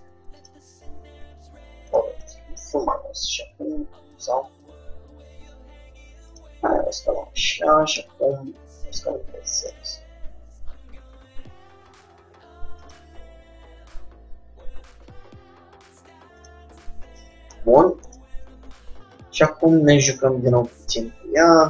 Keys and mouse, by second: 2.5 r, 5.7 r, 8.1 s, 13.5 g, 17.0-18.7 middle drag, 18.7 Tab, 19.5-21.6 drag, 19.8 g, 21.5 middle click.